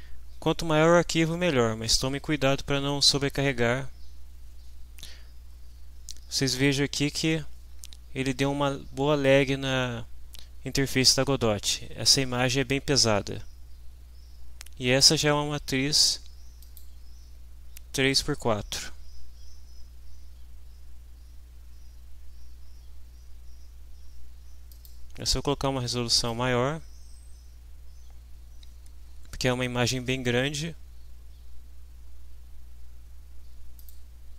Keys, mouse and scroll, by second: 16.6 click, 24.7 click, 26.1 click, 33.8 click.